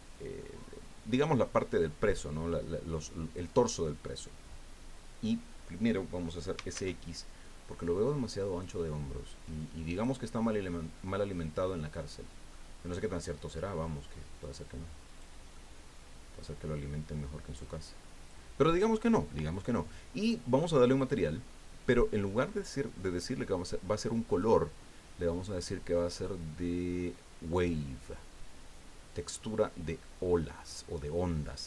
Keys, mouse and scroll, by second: 6.3-7.2 typing, 9.9-12.1 drag, 12.1-12.4 scroll down 2, 12.5 click, 13.2-14.4 middle drag, 14.4 click, 15.4 middle click, 15.5-17.0 drag, 17.0 middle click, 17.6 click, 18.5-21.0 middle drag, 21.0 click, 21.3-24.3 middle drag, 24.3 click.